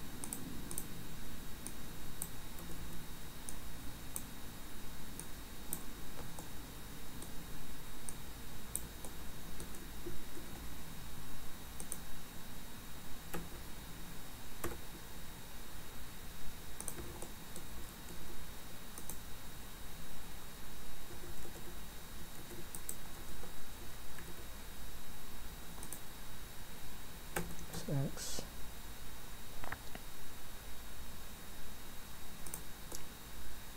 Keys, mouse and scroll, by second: 0.3 click, 0.7 click, 1.7 click, 2.6 a, 3.5 click, 5.2 click, 6.4 middle click, 8.1 click, 9.1 middle click, 10.4 ctrl+r, 17.2 middle click, 18.1 ctrl+r, 23.2 ctrl+z, 24.2 ctrl+r, 32.9 middle click.